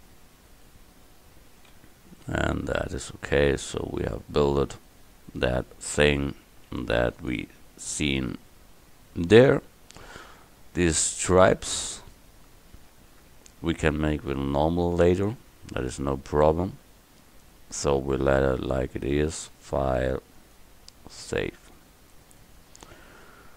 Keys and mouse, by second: 1.8 a, 5.3 KP_1.